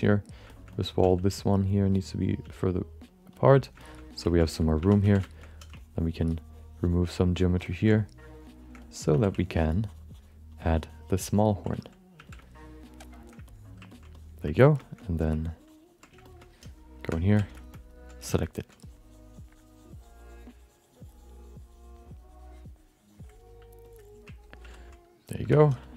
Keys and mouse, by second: 0.5 alt+shift+middle click, 0.7 alt+middle click, 1.1 f, 1.4 click, 2.4 f, 2.7 click, 3.1 click, 3.3 click, 3.5 click, 3.8 alt+shift+middle click, 4.0 middle click, 4.3 ctrl+alt+middle click, 4.8 1, 5.1 f, 5.2 alt+shift+middle click, 5.4 alt+middle click, 5.7-7.2 ctrl+drag, 7.6 middle click, 8.0 shift+click, 8.8 alt+middle click, 9.3 f, 9.3 ctrl+click, 10.5 ctrl+click, 12.1 f, 12.4 shift+click, 13.5 middle click, 13.9 middle click, 14.1 middle click, 14.5 ctrl+alt+middle click, 14.8 middle click, 15.0 alt+middle click, 15.4 click, 16.2 shift+middle click, 16.4 middle click, 17.0 4, 17.3 f, 17.5 shift+middle click, 17.7 alt+middle click, 18.1 f, 18.4 alt+middle click, 18.8-23.4 drag, 23.8 click, 24.7 ctrl+i, 25.4 5, 25.8 alt+middle click.